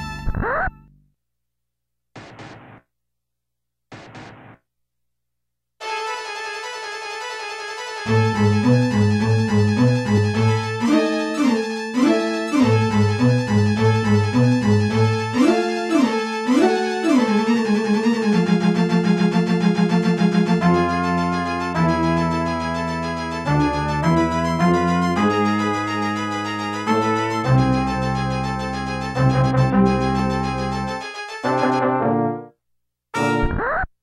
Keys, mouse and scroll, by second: 0.6 right click, 0.8 shift+right click, 1.8 scroll down 1, 2.9-3.6 typing, 4.7 scroll up 2, 5.6 middle click, 7.0 c, 7.5 click, 10.1 right click, 10.2 right click, 10.4 ctrl+z, 12.7 scroll up 2, 14.0 8, 16.3 right click, 16.4 shift+right click, 16.7 right click, 16.8 shift+right click, 17.2 right click, 17.4 shift+right click, 18.1 right click, 18.2 shift+right click, 18.4 right click, 18.6 shift+right click, 20.0 right click, 20.1 shift+right click, 20.7 right click, 20.8 shift+right click, 21.0 right click, 21.1 shift+right click, 21.4 right click, 21.5 shift+right click, 21.7 right click, 21.8 shift+right click, 23.2 right click, 23.3 shift+right click, 23.5 right click, 23.6 shift+right click, 24.2 middle click, 25.2 right click, 25.3 shift+right click, 25.5 right click, 25.6 shift+right click, 26.0 right click, 26.0 shift+right click, 27.3 right click, 27.4 shift+right click, 27.8 right click, 27.9 shift+right click, 28.1 right click, 28.2 shift+right click, 28.4 right click, 28.5 shift+right click, 28.8 right click, 28.9 shift+right click, 29.8 right click, 29.9 shift+right click, 30.2 right click, 30.3 shift+right click, 30.5 right click, 30.6 shift+right click, 30.8 right click, 30.9 shift+right click, 31.2 right click, 31.2 shift+right click, 32.3 right click, 32.4 shift+right click, 32.7 right click, 32.8 shift+right click, 33.7 scroll down 2.